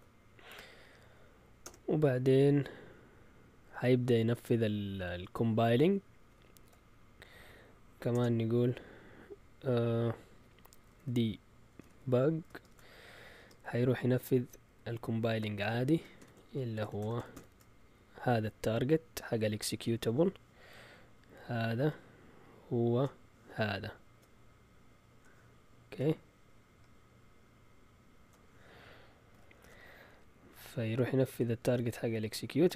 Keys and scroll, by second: 1.6 Return, 8.1 BackSpace, 10.7-13.3 typing, 15.3-17.8 typing, 29.5 shift+super+z, 31.2 shift+Tab.